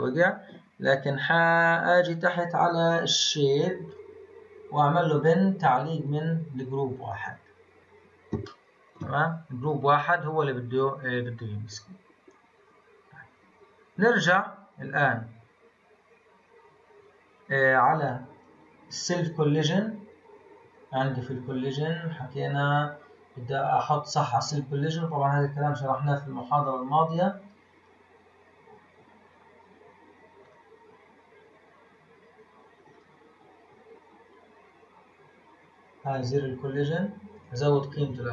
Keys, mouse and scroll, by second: 0.7-3.3 scroll down 22, 3.8 click, 4.4-5.1 scroll down 1, 5.1-7.1 drag, 7.1-8.4 scroll down 3, 8.4-9.2 shift+middle drag, 9.2-11.8 scroll up 6, 11.8 scroll up 1, 13.2-16.9 scroll up 23, 16.9-18.0 scroll down 10, 18.0-19.3 scroll down 3, 20.2-21.1 scroll up 2, 21.1-22.0 scroll up 2, 22.0-22.6 scroll up 2, 22.6-23.9 scroll down 13, 23.9-24.7 scroll down 4, 26.3-28.6 drag, 28.6-30.0 scroll up 6, 30.4-30.8 drag, 30.8-32.9 scroll up 7, 32.9-33.8 drag, 33.8-34.7 scroll down 4, 35.3-36.0 scroll down 2, 36.0-36.4 drag, 36.4-37.3 scroll down 4, 37.3-38.3 drag.